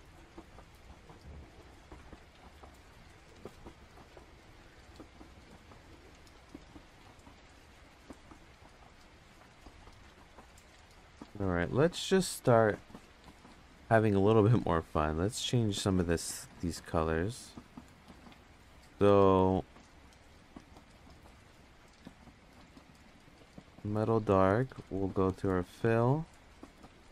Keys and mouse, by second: 0.1 click, 1.6 click, 2.3 click, 2.6 click, 11.0-11.3 drag, 11.9 click, 17.3 click, 19.4 click, 21.1 click, 23.0-24.0 drag, 24.3 click, 25.8 click, 26.8 click.